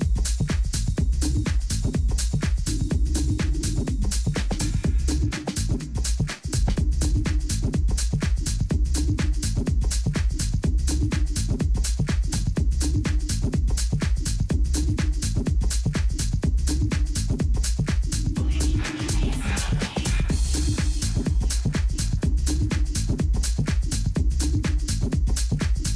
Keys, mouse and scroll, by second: 0.0 middle click, 0.7 a, 1.1 a, 9.5-10.8 middle drag, 11.6-15.1 middle drag, 13.8 a, 14.2 a, 17.1 z, 17.7-20.5 middle drag, 21.0-22.7 middle drag, 21.9 a, 22.2 a, 22.7-23.7 right drag, 23.2-25.0 middle drag.